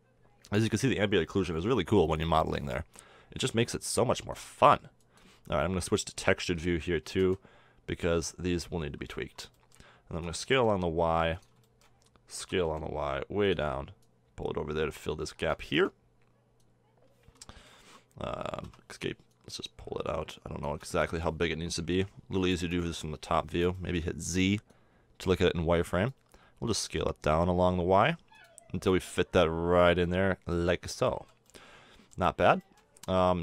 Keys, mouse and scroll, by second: 0.0-0.5 middle drag, 5.7 middle click, 6.4 s, 10.1 s, 12.4 s, 14.0-15.1 drag, 16.6 click, 19.3-20.8 drag, 21.9 KP_7, 23.2 z, 26.6 s, 29.1 click, 30.9 middle drag, 31.1 z, 33.1 Tab.